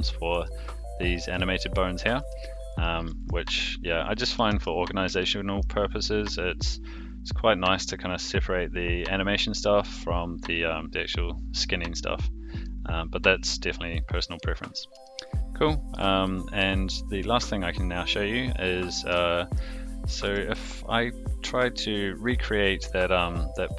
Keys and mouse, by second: 0.3 r, 1.2 r, 2.0 click, 2.2 r, 3.1 a, 4.2 alt+g, 4.5 alt+r, 5.2-5.6 shift+middle drag, 7.1 click, 10.4 click, 12.6-14.4 middle drag, 15.0-15.9 shift+middle drag, 16.2-16.6 middle drag, 17.7 click, 18.4 click, 19.1-19.6 shift+middle drag, 20.2 r, 23.3 click.